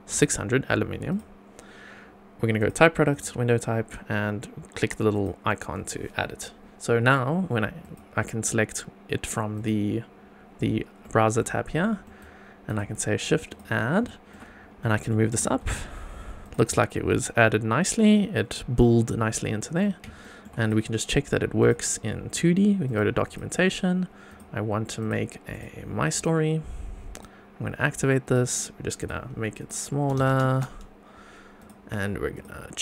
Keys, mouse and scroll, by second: 2.5 click, 3.1 click, 5.1 click, 7.8-9.8 drag, 11.0-11.4 middle drag, 11.8 shift+middle drag, 12.2 shift+right click, 13.5 click, 14.0 shift+middle click, 14.5 scroll up 2, 14.8 middle drag, 15.3 g, 15.5 z, 16.4 click, 16.7-19.8 middle drag, 20.2 shift+middle drag, 20.6 click, 21.6 click, 22.8 click, 23.2 click, 24.3 click, 25.0-25.6 drag, 26.1 click, 27.1 click, 27.7-28.2 scroll down 1, 28.2 click, 29.0 click, 29.6 click, 31.6 click, 32.3 click.